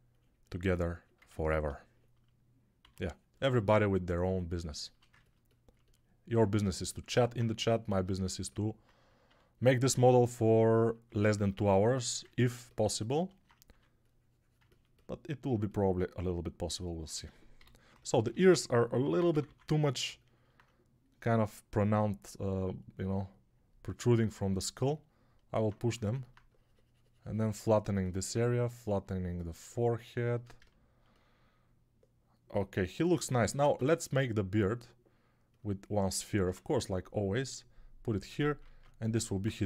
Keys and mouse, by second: 2.7 x, 4.8-8.0 ctrl+drag, 4.8-8.0 ctrl+middle drag, 4.8-8.0 ctrl+right drag, 6.4 2, 9.1 1, 13.6 3, 17.4-19.3 typing, 25.7 3, 33.3 ctrl+Tab, 33.7 shift+a, 36.3 Tab, 38.5 ctrl+Tab.